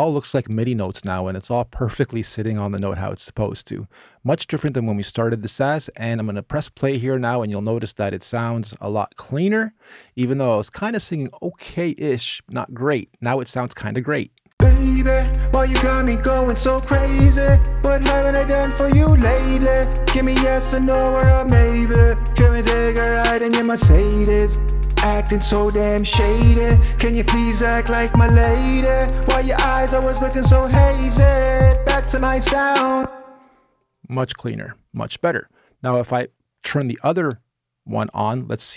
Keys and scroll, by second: 14.2 space, 32.7 space.